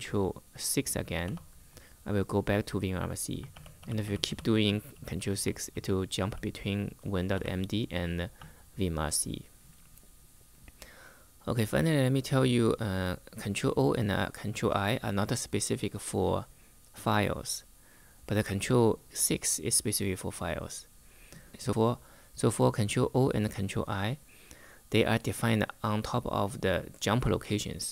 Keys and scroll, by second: 0.9 ctrl+6, 3.2 ctrl+6, 3.5 ctrl+6, 3.7 ctrl+6, 4.0 ctrl+6, 4.2 ctrl+6, 4.8 ctrl+6, 7.0 ctrl+6.